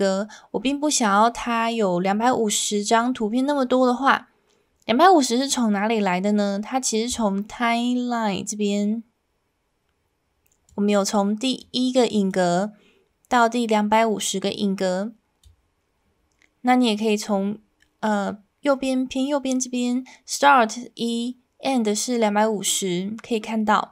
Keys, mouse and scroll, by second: 10.7 click, 12.3-15.4 drag.